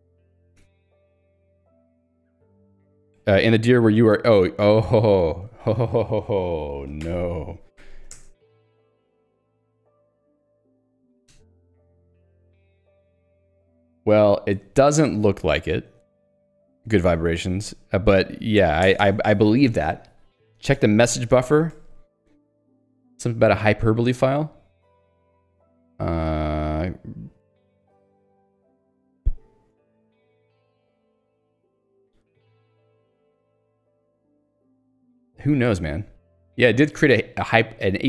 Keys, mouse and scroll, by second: 5.5 click, 7.0 ctrl+alt+j, 7.9 ctrl+j, 8.2 Return, 8.7 ctrl+f, 10.6 shift+h, 11.3 BackSpace, 12.5-14.6 typing, 18.9 ctrl+g, 19.3 Escape, 24.1-25.3 scroll up 3, 25.3-25.9 scroll up 1, 28.7-30.4 scroll up 2, 30.4 scroll up 1, 32.5 scroll down 1, 33.0-33.6 scroll down 1, 33.6 scroll down 1, 34.5 scroll down 1, 34.7-36.0 scroll up 1, 37.3 click.